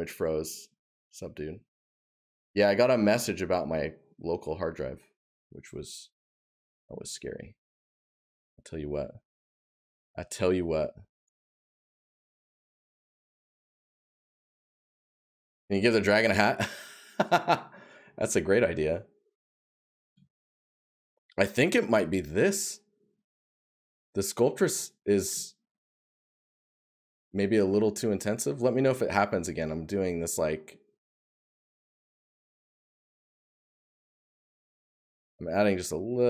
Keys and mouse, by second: 15.6 right click, 17.9 right click, 28.5 right click, 31.0 right click, 33.2 right click.